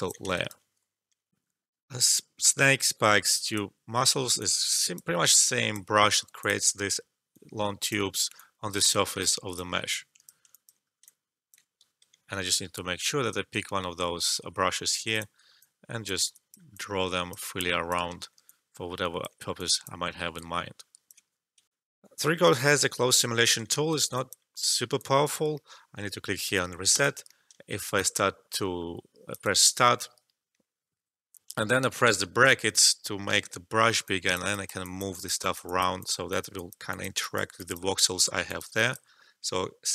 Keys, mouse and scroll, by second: 0.3 alt+right click, 1.3 alt+F12, 3.4-9.9 drag, 10.2 alt+click, 11.3 alt+click, 12.0 e, 15.1-17.5 drag, 18.2 alt+middle click, 18.4 alt+click, 20.3-21.7 alt+drag, 21.7 alt+F12, 22.6 click, 23.8 alt+right click, 24.1-26.9 alt+drag, 27.5 alt+middle click, 27.8 alt+click, 32.0-33.4 typing, 34.0 click, 38.4 alt+click.